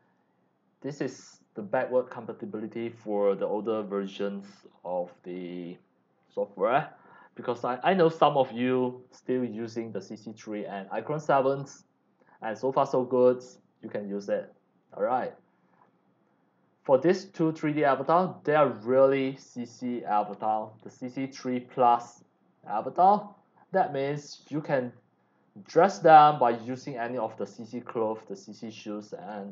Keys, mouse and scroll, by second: 0.0 click, 1.2-3.2 drag, 10.5 click, 14.1 click, 15.7 click, 17.0 click, 18.0-18.6 scroll up 2, 18.9 scroll down 1, 20.0 click, 20.0-21.5 typing, 20.9-21.3 drag, 22.3 drag, 22.9 c, 23.0-23.7 drag, 24.0-24.8 scroll down 3, 24.9 x, 24.9-25.8 drag, 25.4 c, 27.2 scroll down 1, 27.6-27.9 scroll up 3, 28.1 scroll down 1.